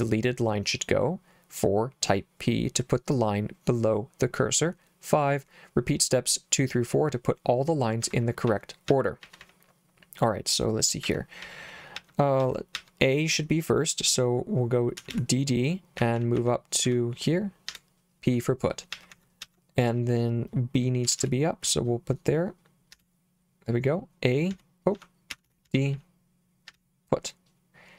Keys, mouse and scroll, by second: 7.8-13.2 typing, 15.0-22.9 typing, 24.2-26.7 typing.